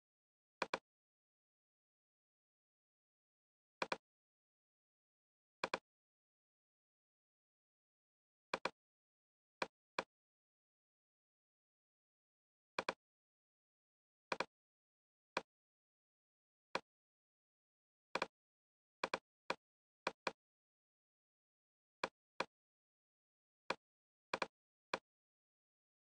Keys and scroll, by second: 16.9 super+z.